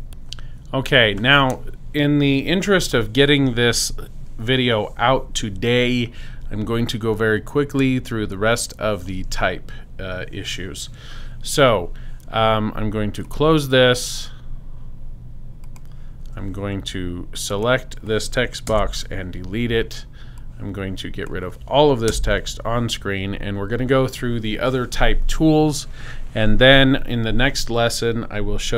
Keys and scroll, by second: 18.7 super+BackSpace, 19.3 BackSpace, 22.1 super+BackSpace.